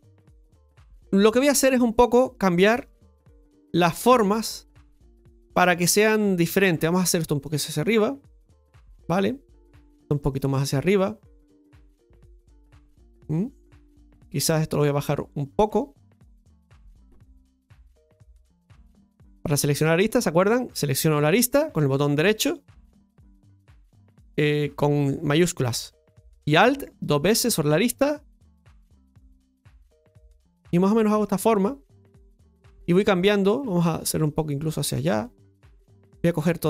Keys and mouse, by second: 2.2 right click, 2.5 alt+shift+right click, 2.7 alt+shift+right click, 3.3 middle click, 4.9 alt+shift+right click, 7.4-8.8 drag, 9.8 right click, 10.1 alt+shift+right click, 11.4-14.2 drag, 14.2 right click, 14.6 alt+shift+right click, 14.7 alt+shift+right click, 15.7 alt+shift+right click, 17.0 click, 18.8 shift+middle click, 20.1 right click, 26.9 alt+shift+right click, 27.1 alt+shift+right click, 28.6-30.2 drag, 30.6 middle click, 32.1 middle click, 34.2-35.2 drag, 36.2 right click.